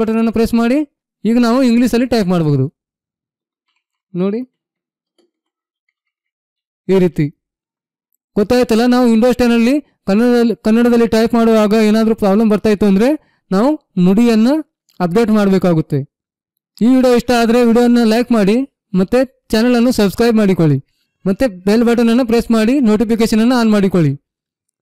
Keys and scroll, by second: 3.3-7.1 typing.